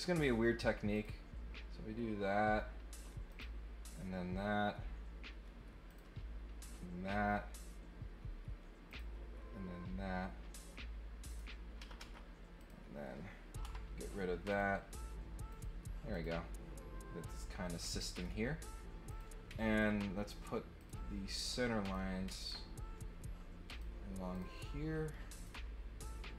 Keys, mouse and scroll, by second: 0.1 click, 0.9 click, 3.3 click, 5.9 click, 8.8 click, 11.2 click, 12.0 Escape, 12.6 click, 14.5 click, 15.5 click, 16.1 click, 17.8 scroll down 1, 18.1 middle click, 19.0 click, 19.7 ctrl+click, 20.8 click, 21.8 click, 22.3 ctrl+click, 23.6 click, 24.3 click, 25.4-26.3 drag.